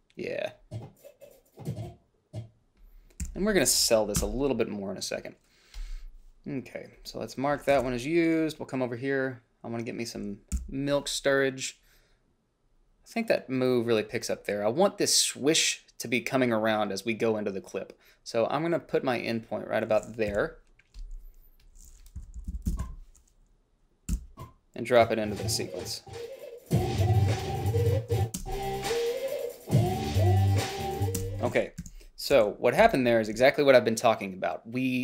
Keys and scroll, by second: 3.5 g, 4.5 Delete, 8.1 ctrl+b, 10.9 f, 20.6 i, 22.5 i, 22.8 Down, 23.0 Left, 23.1 o, 24.4 b, 28.7 space, 31.5 space, 32.1 =, 33.1 h, 33.7 a.